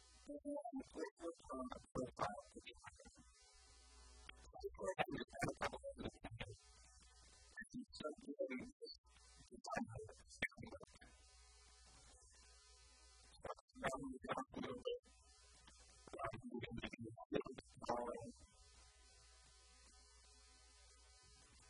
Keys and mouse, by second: 0.4 KP_3, 4.7 ctrl+r, 6.0 click, 6.0-8.1 typing, 10.6-16.4 typing, 17.8 shift+click, 18.9 a, 19.2 b, 21.1 a.